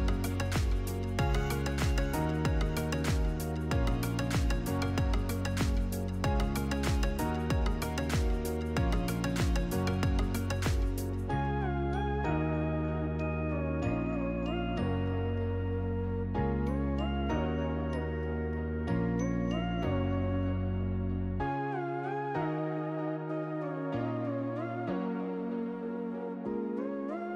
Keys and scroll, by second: 2.3 7, 4.4 BackSpace, 5.1 0, 6.0 Return, 10.4 8, 11.2 Return, 13.0 Up.